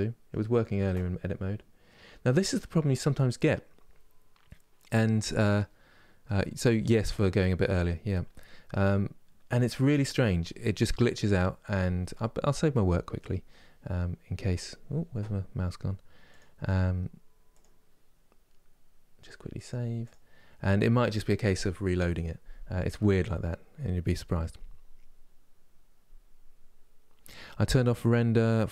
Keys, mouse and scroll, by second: 17.3-28.7 drag.